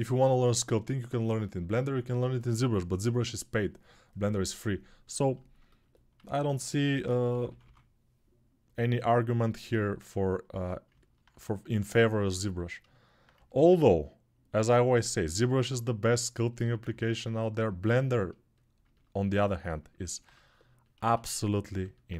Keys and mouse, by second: 6.2 alt+q, 6.7 g, 7.1 [, 7.2 [, 7.4 [, 20.9 1.